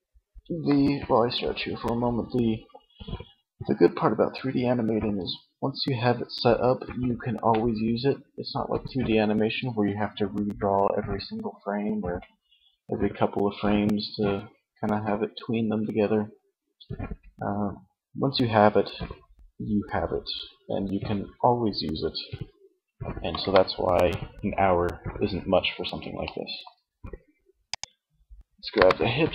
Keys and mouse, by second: 25.2 middle click, 26.8-27.8 middle drag, 27.8 KP_1.